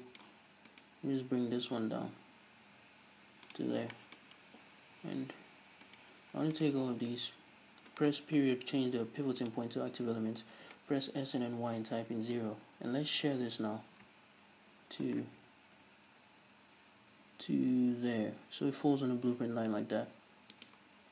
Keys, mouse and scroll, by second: 0.7 right click, 1.6 g, 3.6 shift+click, 3.7-5.9 shift+middle drag, 3.7 scroll down 2, 4.7-5.2 scroll down 2, 5.2-5.9 scroll down 1, 5.9 right click, 6.6 ctrl+right click, 7.2-8.4 scroll up 2, 8.4 ., 10.5 s, 12.1 Return, 12.9 ctrl+alt+shift+s, 20.7 shift+click.